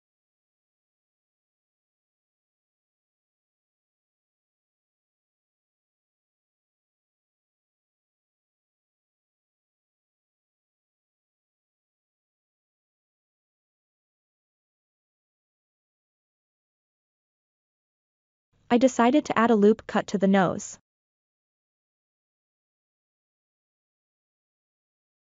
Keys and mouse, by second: 0.2 middle click, 0.9 middle click, 1.2 1, 1.3 middle click, 1.5 click, 1.7 middle click, 2.1 click, 2.8 middle click, 3.8 click, 4.2 middle click, 4.7 click, 5.1 click, 5.3 middle click, 5.8 KP_3, 6.2 click, 6.8-7.9 middle drag, 8.0 ctrl+middle click, 8.3 middle click, 8.9 3, 9.4 ctrl+KP_Add, 9.5 middle click, 9.8 click, 10.3 middle click, 10.7 1, 11.0 click, 11.3 middle click, 11.6 click, 12.6 click, 12.9 middle click, 13.6 middle click, 15.8 click, 16.8 middle click, 17.7 shift+middle click, 19.3 ctrl+r, 22.9 KP_3, 23.6 ctrl+middle click, 24.7 alt+z.